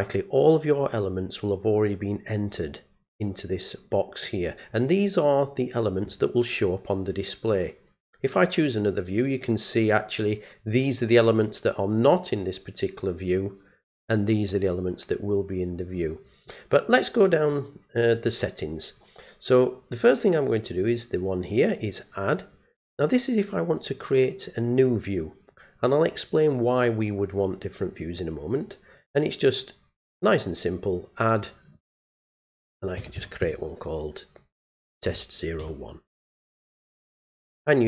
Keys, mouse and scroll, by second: 2.2-3.2 drag, 8.3 click, 30.3 click, 36.9 click.